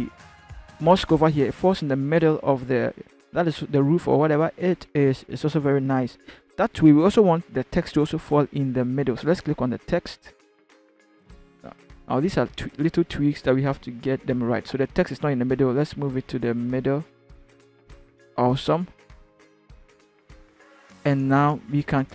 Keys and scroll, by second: 12.2 ctrl+t, 15.2 Left, 15.4 Left, 15.7 Left, 16.0 Left, 16.4 Left, 17.7 Return.